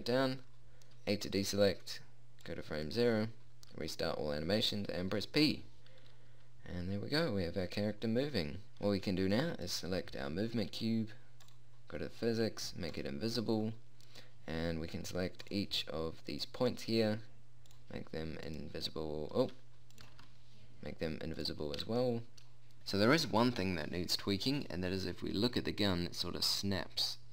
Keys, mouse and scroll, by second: 1.4 a, 5.6 p, 9.9-12.0 right drag, 14.2-16.0 middle drag, 19.2 click, 20.8 ctrl+z, 22.0 click, 24.0 p.